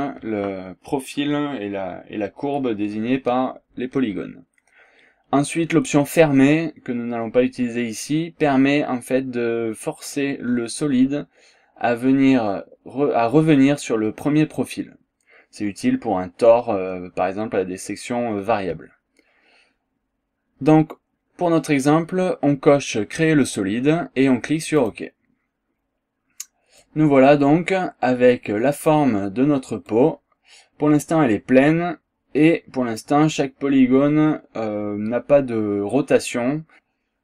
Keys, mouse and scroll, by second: 24.7 click, 26.2 scroll up 1, 26.8-29.1 drag, 29.3 scroll up 1, 29.9-33.2 drag, 34.1-34.9 scroll up 2, 35.1 scroll down 1, 35.5 scroll up 1, 36.1 scroll down 2, 36.5 scroll up 2.